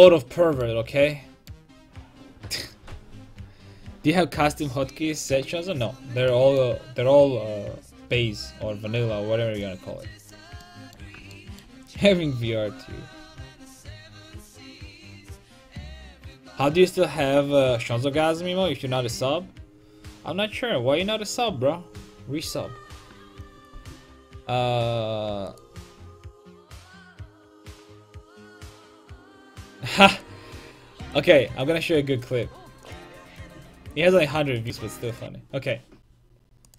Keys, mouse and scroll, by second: 6.3-9.6 middle drag, 9.6-11.3 drag, 10.6-13.9 middle drag, 10.6 right click.